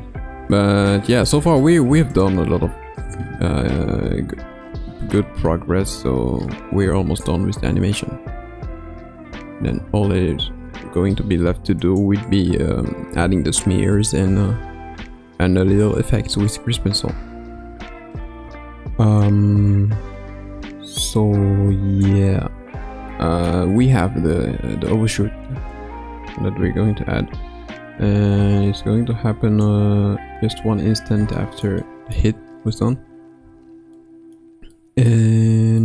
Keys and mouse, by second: 1.1 click, 2.1 click, 6.9 space, 9.8 space, 11.9 click, 14.5 space, 17.5 space, 19.1 click, 23.1-23.5 shift+middle drag, 25.7 click, 31.4 shift+middle drag, 31.8 middle click, 32.9 KP_3, 33.4 KP_1, 33.9-34.4 middle drag, 34.7-35.1 middle drag.